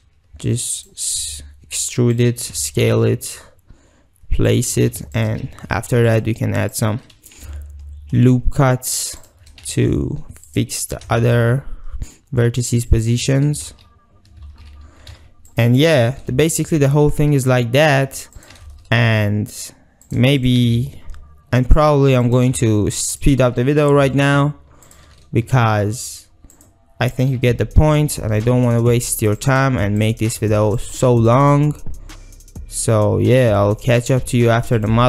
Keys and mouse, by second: 0.8 click, 1.2 s, 2.4 g, 4.8 s, 5.6 ctrl+r, 7.4 g, 9.3 shift+click, 9.9 1, 10.5 click, 10.9 g, 14.5 ctrl+e, 15.1 ctrl+r, 16.2 g, 17.9 shift+click, 18.4 click, 20.4 click, 20.6 g, 21.8 shift+click, 22.5 g, 23.3 shift+click, 24.2 shift+middle click, 24.9 shift+middle click, 25.5 e, 26.6 click, 27.6 g, 29.5 shift+middle click, 30.8 shift+click, 31.4 e, 33.9 shift+drag, 34.8 click.